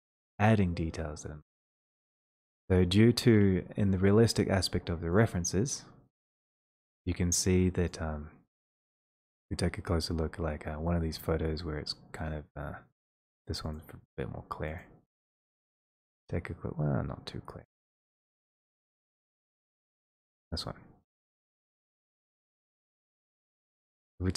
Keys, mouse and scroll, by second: 5.2 click, 9.8 click, 9.9-11.6 scroll, 11.6-12.5 scroll, 12.5-12.9 scroll down 8, 13.1-13.5 scroll, 13.8 click, 14.8 click, 18.4 click, 18.4-19.9 scroll, 20.2 click, 21.5 click, 22.9 click.